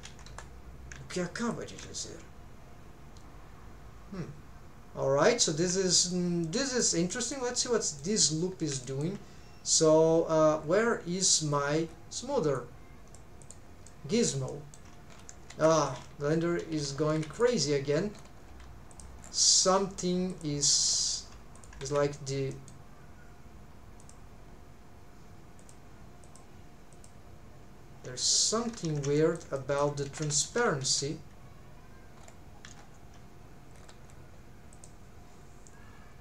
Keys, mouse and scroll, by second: 0.3 3, 1.4 alt+shift+click, 2.8 scroll down 1, 5.9 shift+middle click, 6.4 middle click, 7.1 shift+middle click, 7.6 shift+middle click, 8.5 scroll down 1, 8.8 shift+middle click, 10.3-10.7 scroll down 2, 11.5-11.9 scroll down 3, 12.5 click, 13.9 middle click, 14.5 shift+middle click, 15.1 scroll up 2, 15.5 shift+`, 17.4 d, 18.1-18.5 scroll up 2, 18.9 click, 19.2 scroll down 2, 19.7 middle click, 20.3 click, 20.6 click, 21.0 middle click, 21.5 click, 21.8 alt+z, 22.5 middle click, 24.0 click, 25.6 click, 26.2 click, 26.9 click, 28.7 ctrl+alt+shift+z, 29.2 middle click, 29.5 middle click, 30.1 shift+`, 32.2-32.6 scroll up 2, 32.6 n, 33.7-34.3 scroll down 4, 34.9 click.